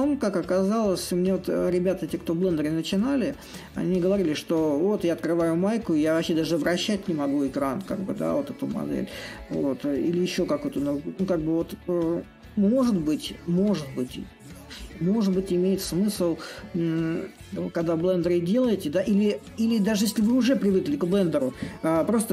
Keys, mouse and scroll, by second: 2.1-7.1 drag, 7.2-12.2 drag, 12.7-22.3 drag.